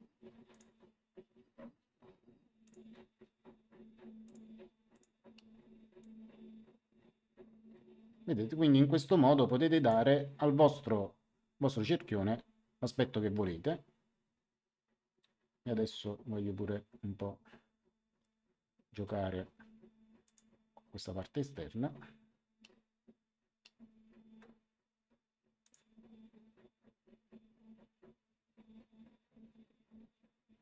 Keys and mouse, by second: 2.6 ctrl+click, 4.2 ctrl+click, 5.9 click, 18.9 Return, 20.2 click, 25.6 click.